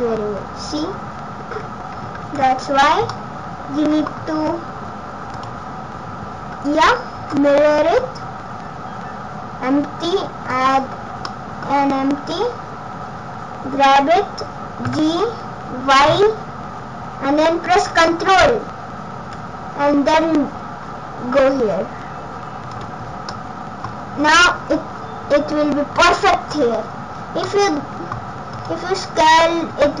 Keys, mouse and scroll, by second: 2.3 ctrl+z, 2.8-3.3 scroll down 5, 3.1 middle click, 4.5-5.3 scroll up 2, 5.3 click, 7.2 shift+a, 11.2 middle click, 11.7-12.1 scroll down 3, 12.0 scroll up 5, 14.9 g, 23.0 scroll up 3, 23.3 middle click, 23.9-24.3 scroll down 4, 27.4 middle click, 28.5 right click, 29.3 click, 29.7 s.